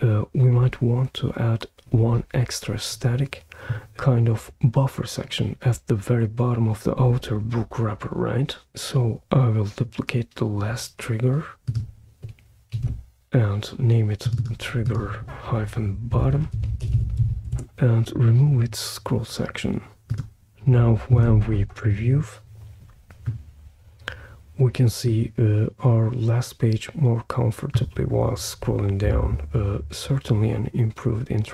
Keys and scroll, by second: 12.7 super+d, 16.2-17.7 typing, 21.1 super+p.